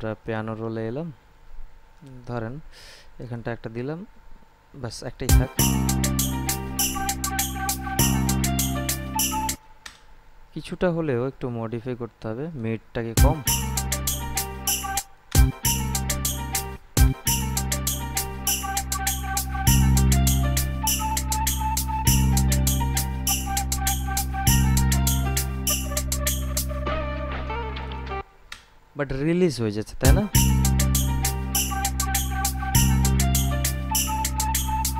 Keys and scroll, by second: 5.4 space, 9.7 space, 13.3 space, 15.1 space, 17.0 space, 28.4 space, 30.2 space.